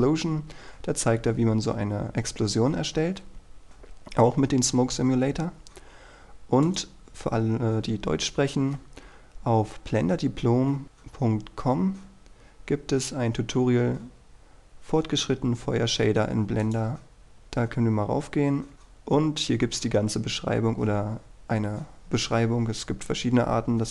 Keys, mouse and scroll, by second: 0.3-3.2 scroll down 1, 3.2-3.9 scroll up 1, 3.9-6.8 scroll down 1, 6.8 click, 8.4-13.2 scroll up 1, 16.8 click, 20.1-21.7 scroll down 1, 21.7-23.9 scroll up 1.